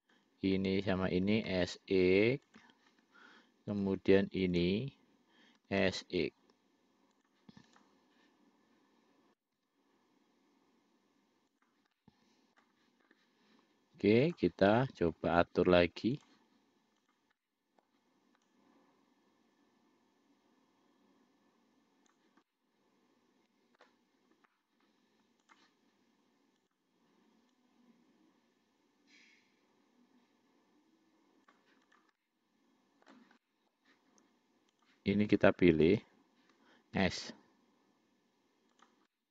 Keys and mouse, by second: 0.3 click, 1.5 s, 4.0 click, 4.8 click, 5.9 s, 8.0 click, 9.6 5, 12.2 middle click, 14.5 click, 15.0 middle click, 16.4 click, 17.3 click, 17.7 middle click, 18.7-22.5 drag, 22.7-24.1 middle drag, 25.7 click, 26.9 click, 27.8-31.9 drag, 32.2 click, 32.5 middle click, 33.7 middle click, 35.0 click, 35.5 click, 36.1 shift+click, 37.2 s.